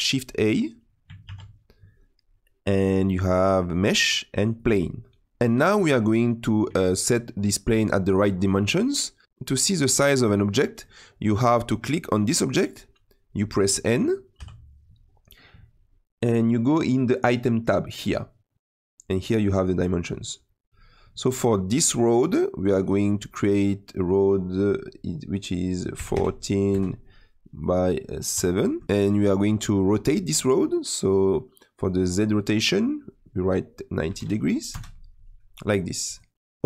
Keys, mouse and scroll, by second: 1.2 shift+a, 5.2-11.8 middle drag, 11.8 click, 12.5 click, 14.3 n, 17.8 click, 22.8-26.1 drag, 27.6-28.8 drag, 28.8-30.0 scroll down 1, 30.0 scroll down 1, 32.5-35.6 drag, 36.0 click, 36.3-36.6 middle drag.